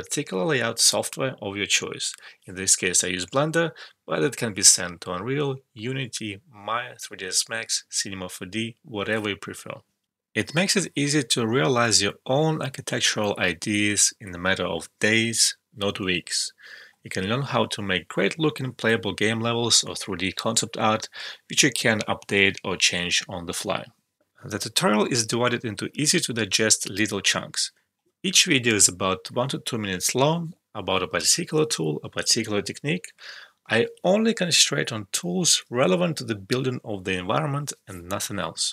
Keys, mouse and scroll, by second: 0.0-0.6 typing, 0.5 click, 0.9 shift+middle click, 1.1 ctrl+z, 1.7 middle click, 2.1 scroll up 1, 2.3 click, 2.4 x, 5.5 middle click, 5.7 r, 6.3 ctrl+click, 6.4 middle click, 6.6 scroll up 1, 6.8 middle click, 6.9 middle click, 7.4 shift+middle click, 10.0 ctrl+F12, 10.2 alt+click, 10.4 alt+shift+middle click, 10.5 right click, 10.6 click, 10.8 space, 11.2 alt+click, 11.8 alt+middle click, 12.1 click, 12.1 space, 13.0 alt+click, 13.2 right click, 13.3 click, 13.5 space, 13.8 alt+middle click, 13.8 alt+click, 14.4 alt+middle click, 14.6 click, 15.2 alt+middle click, 15.9-17.1 drag, 17.1 Return, 17.3 alt+click, 17.4 alt+middle click, 17.7 click, 18.2 alt+right click, 18.3 alt+click, 18.7 alt+right click, 18.7 alt+click, 18.9 ctrl+z, 19.2-21.3 alt+drag, 21.3 ctrl+z, 21.8 click, 22.1 alt+middle click, 22.2-23.5 ctrl+drag, 23.5 ctrl+z, 34.5 click, 34.9 alt+click, 36.1 right click, 36.3 click.